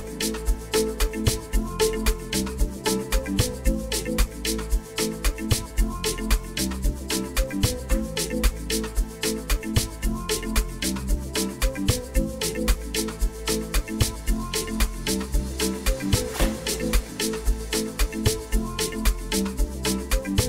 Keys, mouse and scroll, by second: 1.0 click, 2.6 drag, 19.6 click, 19.8 click, 20.2 click.